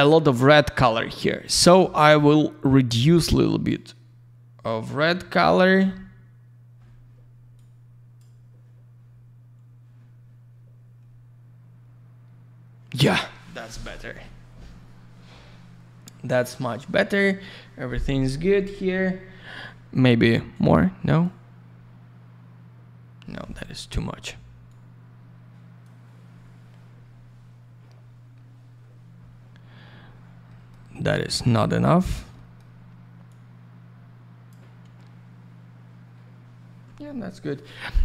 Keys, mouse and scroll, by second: 3.0 click, 7.5 click, 20.5 click, 24.7 click, 29.9 scroll up 1, 30.4 middle click, 30.9 scroll up 1, 31.3 middle click, 31.8-32.4 scroll up 1, 32.4 middle click, 33.2 click.